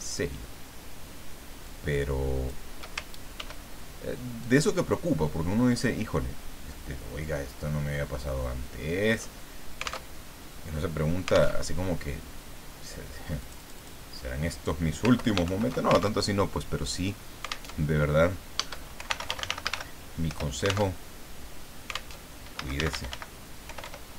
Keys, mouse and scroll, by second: 1.6-2.8 shift+drag, 3.4 ctrl+d, 4.4-9.3 ctrl+drag, 10.1 alt+Tab, 11.5 alt+Tab, 13.4 click, 15.1 ctrl+Home, 15.4 ctrl+shift+End, 16.2 ctrl+alt+shift+Tab, 17.7 alt+Tab, 18.7-20.2 typing, 20.3 Return, 21.0 alt+Tab, 22.1 alt+Tab, 22.3-24.1 typing.